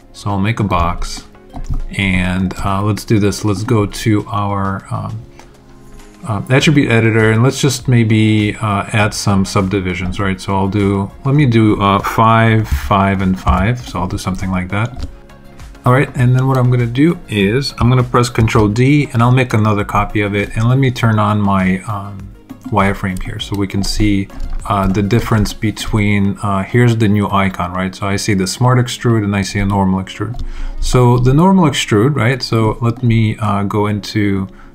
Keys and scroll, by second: 12.6 5, 14.3 alt+5, 18.3 super+d.